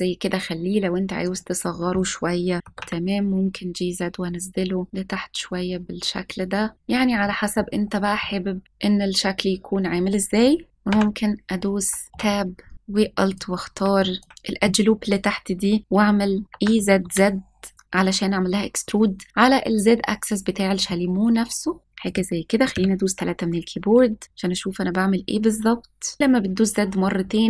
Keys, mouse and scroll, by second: 1.2 click, 2.6 g, 2.7 z, 6.7 click, 7.2 middle click, 7.8 scroll up 1, 8.1-8.6 middle drag, 10.7 scroll down 2, 10.8 Tab, 12.1 shift+middle click, 12.3-12.6 scroll up 2, 13.2 alt+click, 14.1 alt+click, 16.4 e, 16.7 z, 16.9 z, 21.7 z, 22.0 click, 22.7 KP_3, 26.2 g, 26.2 z.